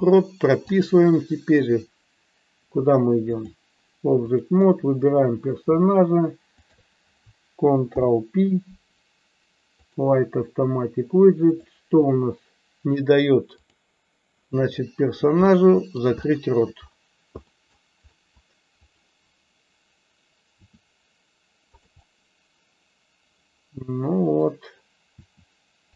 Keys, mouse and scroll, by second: 0.6-3.6 drag, 4.2 click, 6.6 shift+click, 11.6-13.8 drag, 15.4 middle click, 16.3 shift+middle click, 17.5 middle click, 18.1 middle click, 18.9 click, 21.7 click, 21.9-24.5 middle drag.